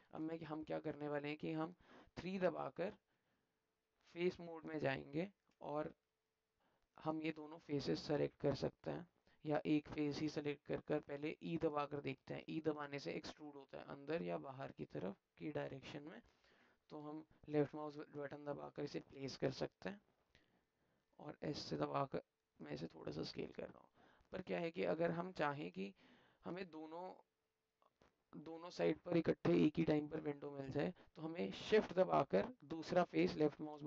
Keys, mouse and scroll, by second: 0.6 alt+click, 1.1 click, 5.1 alt+click, 6.1-7.2 alt+middle drag, 8.4 alt+click, 10.3 alt+click, 19.3-21.1 alt+drag, 22.8-24.3 drag, 26.1 click, 27.6-30.1 alt+drag, 30.4 alt+click, 30.5 alt+middle click, 32.8 shift+click.